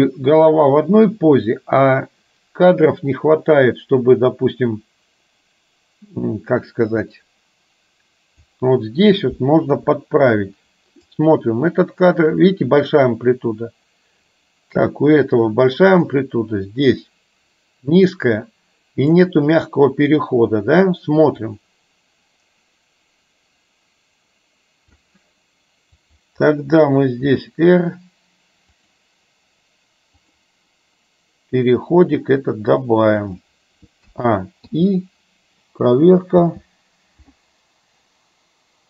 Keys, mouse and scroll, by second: 9.8 KP_3, 11.1-19.3 drag, 21.5-25.1 drag, 27.3 r, 32.0 r, 34.2 a, 34.8 i, 36.6 space.